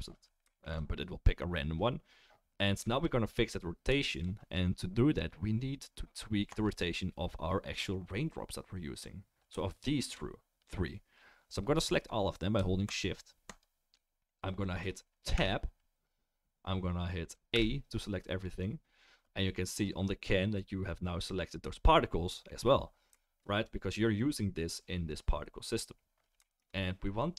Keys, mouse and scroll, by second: 6.6 click, 10.6 click, 11.8-12.5 drag, 12.9 shift+click, 13.5 shift+click, 15.3 Tab, 17.5 a, 19.8 middle click, 22.7-26.4 middle drag, 26.4-27.3 shift+right drag.